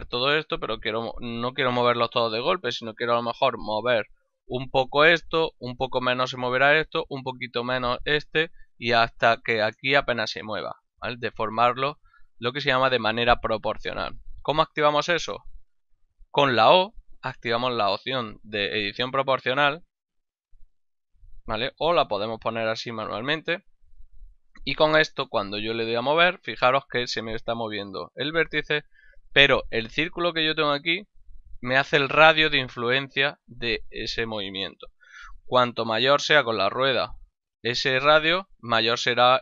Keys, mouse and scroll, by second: 1.5 g, 2.4 right click, 4.6 g, 5.1 right click, 7.1 right click, 7.7 right click, 9.3 right click, 9.7 right click, 11.6 right click, 15.9 o, 19.9 click, 21.0 click, 22.6 click, 25.4 g.